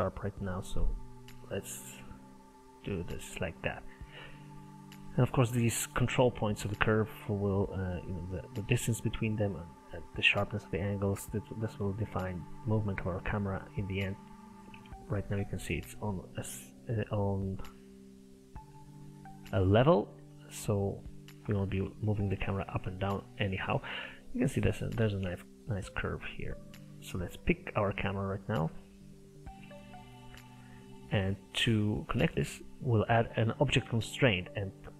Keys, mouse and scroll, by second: 1.1-3.8 drag, 3.8-4.2 scroll down 3, 4.2-5.8 middle drag, 5.8 click, 6.8-9.3 drag, 9.3-13.4 middle drag, 13.4 click, 13.8 middle click, 14.3 scroll up 1, 14.5 middle click, 14.8 Tab, 15.0-15.4 scroll up 2, 15.4-18.1 middle drag, 18.1-18.5 scroll down 3, 18.5-23.1 middle drag, 23.1 click, 23.4-25.6 middle drag, 25.6-27.5 drag, 28.5 click, 29.7 middle click, 30.3 scroll down 10, 30.4-32.1 scroll up 8, 32.1 click, 34.3-34.9 drag.